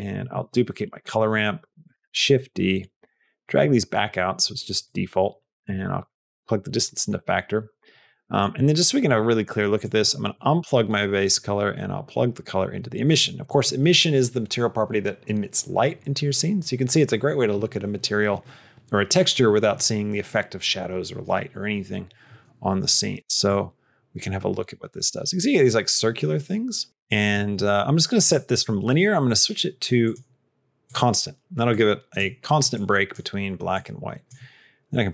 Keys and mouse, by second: 0.0 click, 0.2 shift+d, 1.7 click, 2.7 click, 3.3 click, 4.7 click, 5.9 click, 6.9 middle click, 8.2 middle click, 9.7 click, 11.6-12.6 drag, 23.4-27.2 drag, 28.1-29.3 drag, 29.9 click, 31.9 click, 32.6 click, 33.6 click.